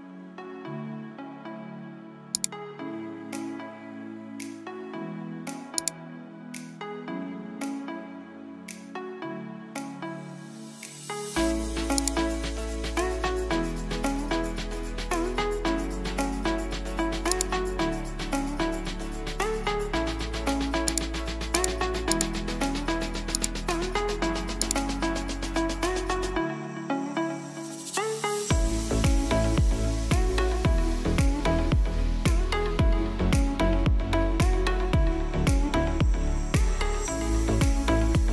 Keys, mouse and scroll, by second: 2.3 click, 5.7 click, 11.6 click, 17.1 click, 20.6 right click, 22.0 right click, 23.3 click, 26.3-28.7 typing, 29.2-32.9 drag, 32.0-33.8 typing, 36.2-36.9 typing, 37.0 ctrl+alt+scroll up 1, 38.1-38.3 typing.